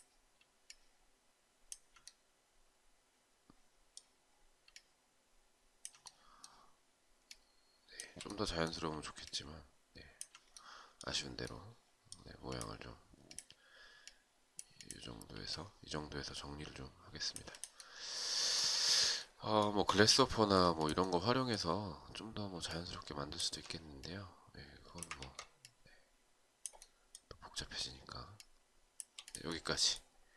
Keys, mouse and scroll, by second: 0.2 alt+click, 4.2 alt+click, 8.8 alt+click, 15.0 alt+click, 22.2 alt+click, 27.9 shift+click.